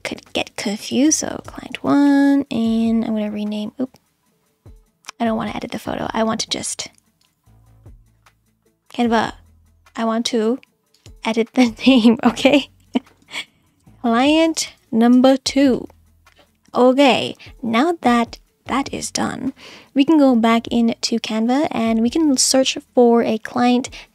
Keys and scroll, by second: 0.0-1.8 typing, 13.4-15.4 typing, 16.7 Return.